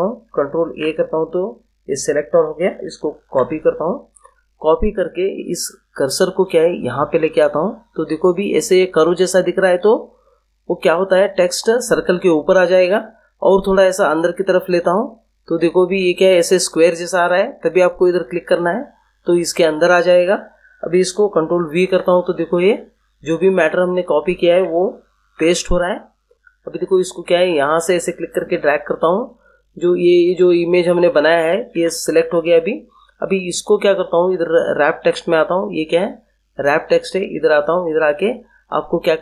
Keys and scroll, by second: 0.6 ctrl+a, 3.2 ctrl+c, 21.7 ctrl+v, 25.1 ctrl+v, 31.7 ctrl+z.